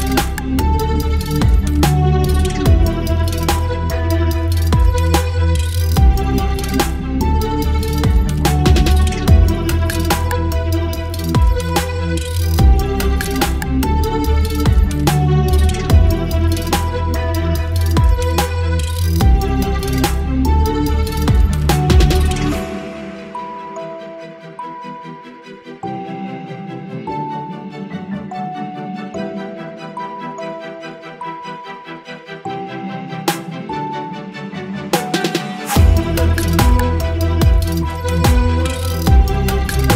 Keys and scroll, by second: 0.0 Delete, 1.0 Delete, 1.9 Delete, 3.0 Delete, 3.3 space, 4.2 Delete, 4.6 Delete, 5.6 Delete, 5.8 v, 5.9 space, 6.4 ctrl+t, 11.8 space, 14.1 space, 17.2 ctrl+g, 19.9 ctrl+j, 24.3 space, 26.2 ctrl+t, 29.1 Return, 34.5 space, 39.3 ctrl+BackSpace.